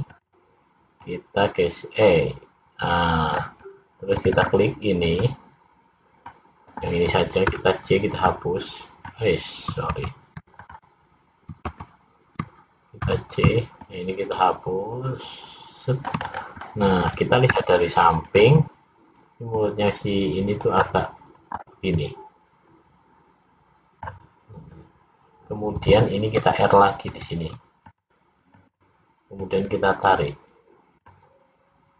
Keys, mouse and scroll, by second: 1.0 click, 4.2 click, 4.5 click, 5.3 middle click, 7.5 c, 11.8 ctrl+z, 13.0 c, 16.6 middle click, 19.6 click, 22.0 click, 27.1 ctrl+r, 29.5 click.